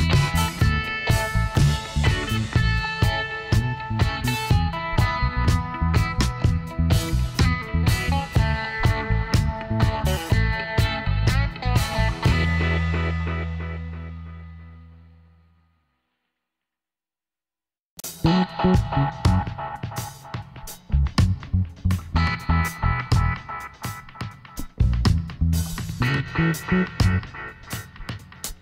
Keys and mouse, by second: 2.5-4.1 right drag, 3.0 KP_1, 4.1-5.9 middle drag, 6.9 g, 9.9 s, 16.5-18.1 drag, 18.7-20.4 drag, 21.5-24.6 middle drag, 25.6-26.8 middle drag, 26.8 e.